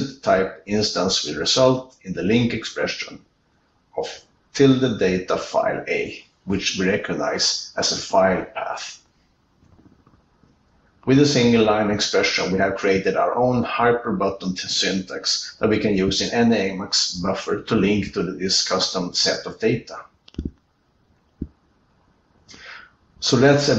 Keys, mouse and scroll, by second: 23.5 ctrl+r, 23.5 Left, 23.5 Right, 23.5 ctrl+n, 23.5 Tab, 23.5 ctrl+b, 23.5 alt+Return, 23.5 click.